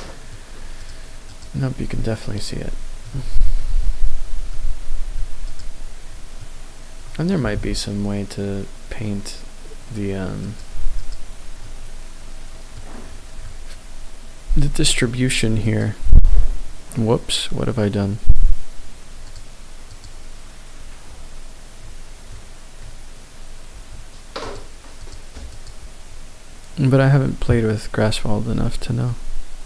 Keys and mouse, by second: 0.7-1.5 drag, 2.1-3.1 middle drag, 3.2-3.6 shift+middle drag, 4.4-5.4 middle drag, 5.4 click, 7.4 g, 7.6 z, 10.5 click, 10.9 click, 11.6-12.7 middle drag, 15.6 click, 19.3 click, 19.9 click, 24.4 click, 25.0-25.7 drag, 29.1-29.6 middle drag.